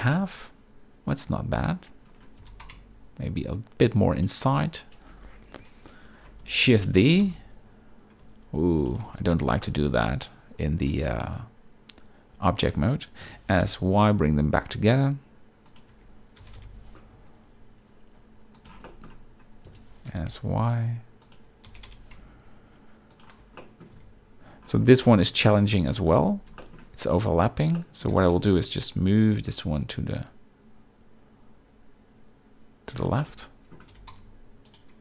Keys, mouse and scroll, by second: 2.4 g, 2.6 z, 5.6 KP_7, 6.7 shift+d, 7.0 g, 7.2 x, 9.0 z, 9.6 shift+middle drag, 12.6 Tab, 13.2 s, 13.6 y, 15.6 click, 15.9 Tab, 16.4 g, 16.6 y, 18.8 shift+middle drag, 19.6 s, 20.0 y, 21.6 g, 21.9 y, 23.1 shift+click, 23.6 middle drag, 23.9 z, 25.0 shift+middle drag, 25.5-25.9 middle drag, 26.6 shift+middle click, 27.8 middle click, 28.1 g, 28.3 x, 33.2-33.7 middle drag, 33.9 g, 34.1 x.